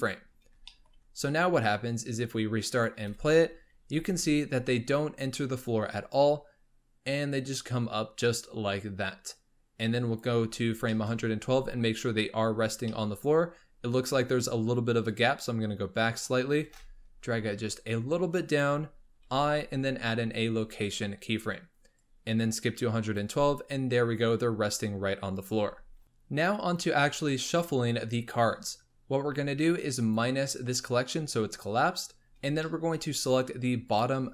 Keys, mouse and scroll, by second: 0.7 shift+middle click, 1.1-2.0 scroll down 4, 2.0-3.0 drag, 3.0 space, 3.9 space, 6.0-9.0 drag, 10.5 scroll up 4, 10.9 shift+middle click, 11.2-12.5 scroll up 8, 12.5-12.9 scroll up 4, 12.9-15.0 shift+middle drag, 15.0 click, 16.5 g, 21.9-25.0 drag, 25.4-26.5 scroll down 18, 29.9 click, 32.2-32.6 scroll up 1, 32.6-32.9 shift+middle drag, 32.9-33.7 scroll up 1, 33.7 scroll up 1, 33.8 click.